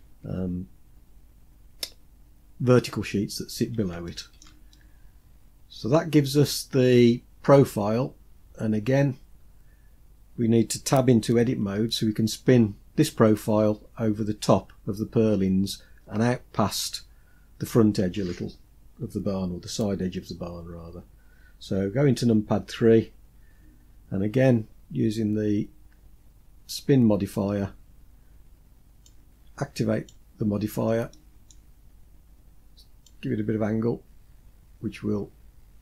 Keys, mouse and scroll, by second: 3.0 scroll down 2, 3.6-4.1 shift+middle drag, 4.3-5.5 middle drag, 7.8-10.4 scroll up 3, 11.2 Tab, 21.7 KP_3, 23.0-23.7 scroll up 1, 26.2 click, 28.6-29.6 drag, 30.1-30.7 scroll down 2, 30.7 middle click, 32.6-35.8 drag.